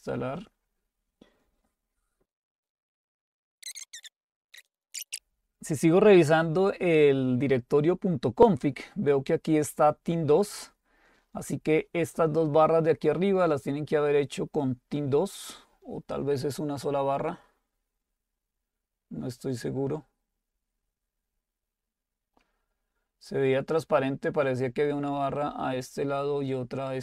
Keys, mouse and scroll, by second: 0.3 click, 2.8 click, 4.5 click, 9.4 click.